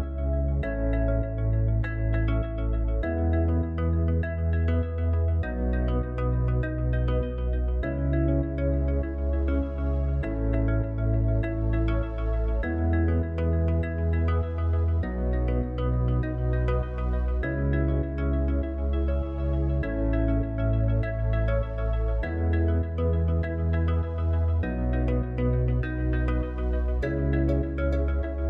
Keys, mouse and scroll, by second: 0.3 s, 1.6 s, 2.7 s, 3.8 s, 4.8 s, 5.9 s, 7.8 click, 14.1-16.4 drag, 19.1-23.2 drag, 23.6-25.1 middle drag, 25.1 scroll up 2, 25.2-26.0 middle drag, 27.5 click.